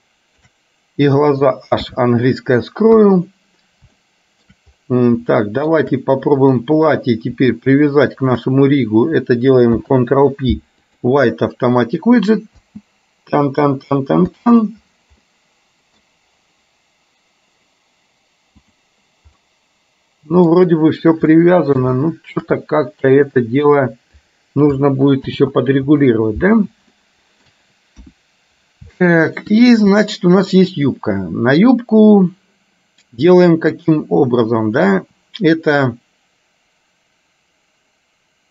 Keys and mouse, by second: 0.0 shift+click, 2.0 h, 3.1 KP_1, 4.0 shift+middle click, 5.5 shift+middle click, 6.6 click, 8.2 shift+click, 9.7 ctrl+p, 12.7 space, 14.5 space, 15.3 middle click, 19.5-20.6 middle drag, 21.5 middle click, 22.1 shift+middle click, 25.5 ctrl+z, 27.0 shift+middle click, 28.1 KP_1, 29.1 middle click, 30.1 click.